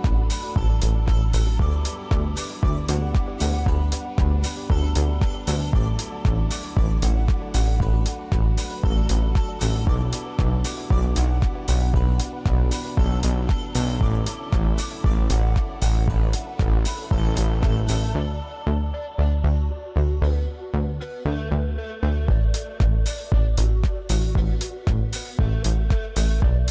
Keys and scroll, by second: 5.4 space, 8.5 space, 9.4 Delete, 9.6 space, 10.2 Delete, 15.5 ctrl+shift+[, 17.4 space.